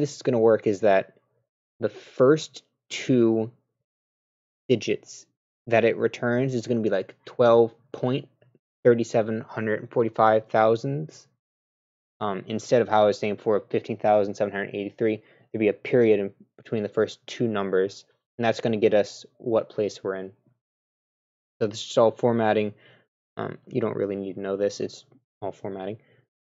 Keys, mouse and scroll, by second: 21.0-21.5 scroll down 2.